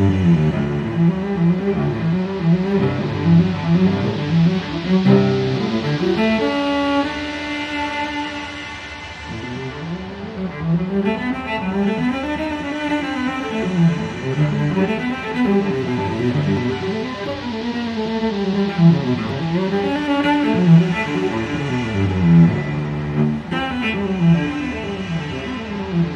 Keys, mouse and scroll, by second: 3.8 click, 5.0-5.3 scroll up 1, 6.7 click, 9.3 click, 12.4 click, 14.3 click, 16.3 click, 18.5 click, 19.6-20.2 scroll down 2, 20.5-20.9 scroll up 1, 23.7 click, 25.1 click.